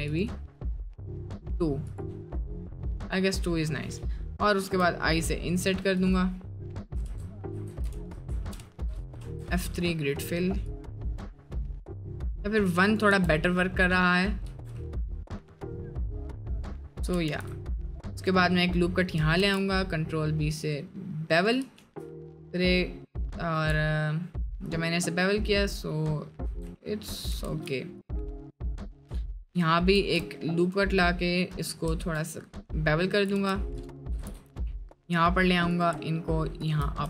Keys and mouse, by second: 4.0 middle click, 4.8 i, 7.2 ctrl+z, 7.8 ctrl+z, 8.2 ctrl+z, 9.2 F3, 13.4 Tab, 13.4 middle click, 14.0 middle drag, 14.5 Tab, 14.8 middle click, 16.8 middle click, 17.3 ctrl+r, 18.4 middle click, 19.4 ctrl+b, 21.8 ctrl+r, 23.7 Tab, 24.9 middle click, 25.9 middle click, 26.4 Tab, 26.8 middle click, 27.4 ctrl+r, 29.0 middle click, 29.9 ctrl+b, 31.5 middle click, 33.3 g, 34.1 g.